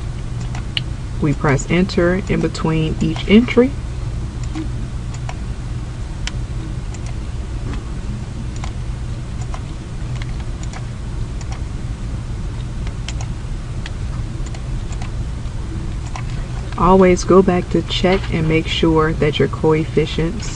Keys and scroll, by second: 0.6 2, 1.5 Return, 2.4 3, 3.2 Return, 4.6 6, 5.3 Return, 8.6 4, 9.5 Return, 10.7 8, 11.5 Return, 14.6 1, 15.0 2, 16.2 Return.